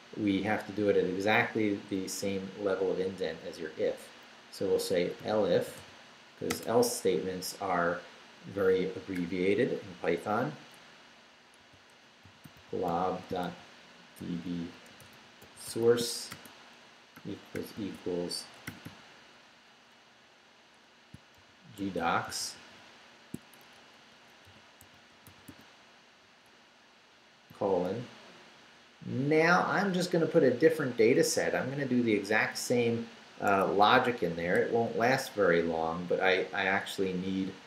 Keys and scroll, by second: 4.8-6.5 typing, 11.6-18.7 typing, 20.1 Left, 21.1-25.8 typing, 26.2 Right, 27.1 shift+Right, 27.5 shift+;, 29.6 Up, 32.6 Left, 33.5 Escape, 34.0 shift+Escape, 34.3 shift+v, 34.8 shift+Down.